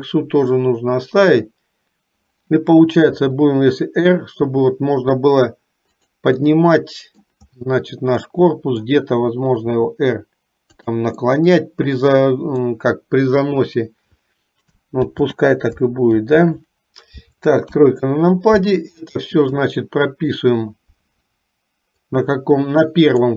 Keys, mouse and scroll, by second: 3.2 r, 6.7 middle click, 8.3 middle click, 10.0 r, 11.5-12.8 middle drag, 15.2 ctrl+z, 16.3 ctrl+z, 17.8 KP_3, 19.7 click, 22.1-23.3 drag.